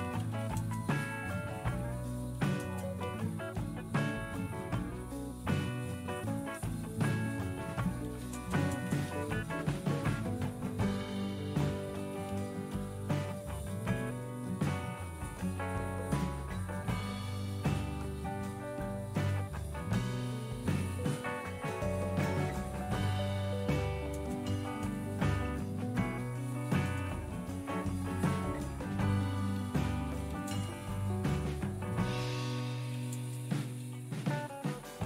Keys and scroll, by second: 0.0-0.8 typing, 2.0-2.9 typing, 4.0-4.8 typing, 6.7-9.9 typing, 10.9-13.8 typing, 21.9 ctrl+a, 23.6-24.0 typing, 24.7 Return, 26.8 Return, 28.8-34.5 typing.